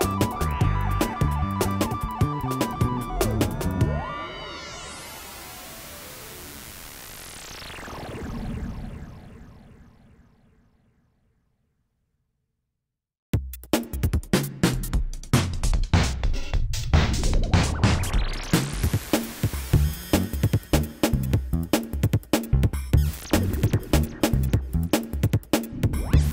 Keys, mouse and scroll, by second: 0.3 shift+click, 0.6 Tab, 0.9 s, 2.1 shift+middle click, 2.4 shift+middle click, 3.5 shift+d, 4.9 ctrl+a, 5.4 Tab, 5.6 click, 5.8 Tab, 6.4 g, 7.4 click, 9.9 KP_1, 10.0 KP_5, 10.3 Tab, 10.9 ctrl+d, 11.4-13.6 drag, 13.6 middle click, 19.0 middle click, 21.6 middle click, 21.8 middle click, 22.0 middle click, 22.6 middle click, 23.1 Tab, 23.3 Tab, 23.7 q, 24.4 g, 25.2 shift+middle click, 25.4 middle click.